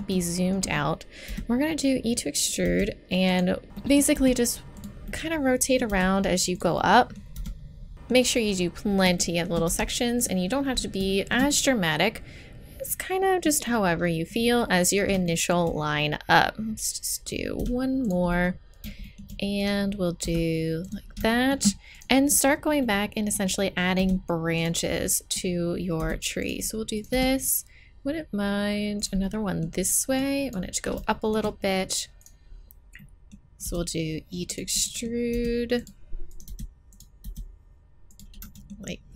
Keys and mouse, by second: 1.3 e, 2.6 e, 3.6 g, 4.2 e, 5.9 e, 7.9 e, 9.7 e, 17.6 e, 20.2 e, 21.9 right click, 22.8 right click, 24.0 e, 26.0 e, 27.1 e, 30.2-31.9 drag, 32.2 right click, 33.0 middle click, 33.7 e, 35.3 e, 36.5 e, 37.2 e.